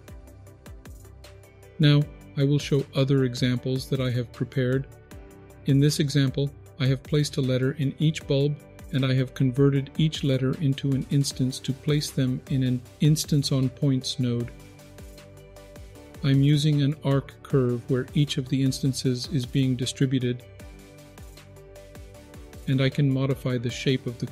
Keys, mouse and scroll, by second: 1.3 click, 2.3 click, 4.8 click, 5.7-7.1 scroll down 4, 7.1-9.0 scroll up 3, 9.0-9.9 scroll down 4, 9.9-10.3 middle drag, 10.6-11.4 scroll down 3, 11.1 middle click, 11.7-13.6 scroll up 5, 13.6 click, 14.2-15.5 scroll up 2, 15.5 middle click, 15.5-15.9 scroll up 1, 20.9-22.2 drag, 22.7 ctrl+z, 23.2-24.3 drag.